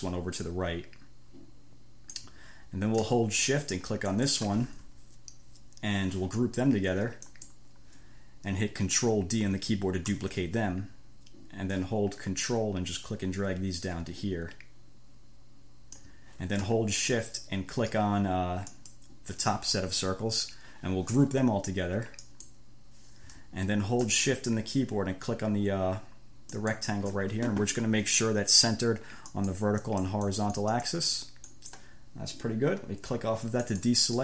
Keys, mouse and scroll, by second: 4.3 shift+click, 7.5 click, 10.3 ctrl+d, 12.7-16.4 ctrl+drag, 18.9 shift+click, 22.5 click, 26.8 shift+middle click, 29.5 middle click, 30.1 middle click, 30.9 middle click, 31.8 click, 33.9 click.